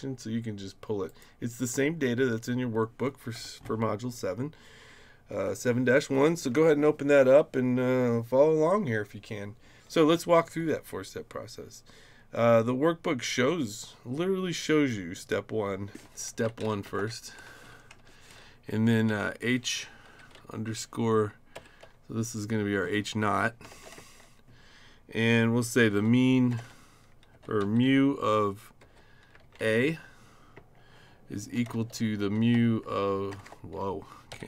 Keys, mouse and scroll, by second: 1.1 click, 16.0-17.4 typing, 18.0 Right, 19.1 shift+h, 20.1 shift+-, 21.5 0, 23.7 shift+;, 24.0 space, 25.5-27.6 typing, 28.8 shift+-, 29.4 shift+a, 30.5-34.4 typing.